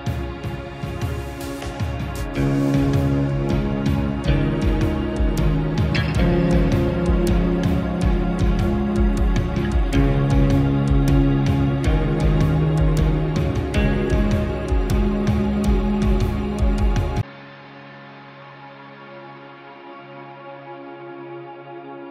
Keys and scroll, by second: 4.9 ctrl+j.